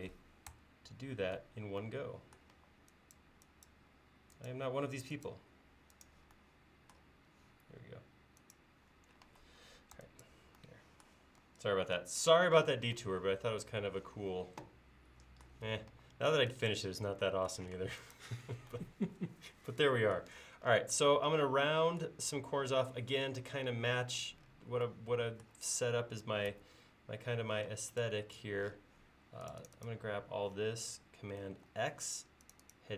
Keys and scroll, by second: 0.6 BackSpace, 2.6 e, 4.0 l, 5.5 l, 9.3 e, 15.9 e, 17.8 space, 26.6 a, 27.7 space, 31.7 super+x.